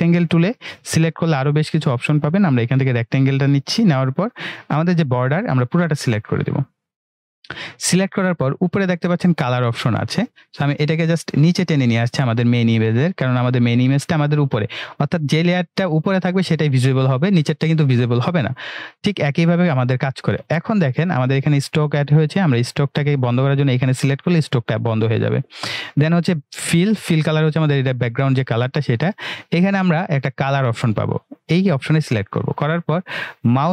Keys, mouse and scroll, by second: 5.2-7.1 drag, 11.0-11.9 drag, 22.0 click, 26.1 click, 26.7 click, 31.7 click.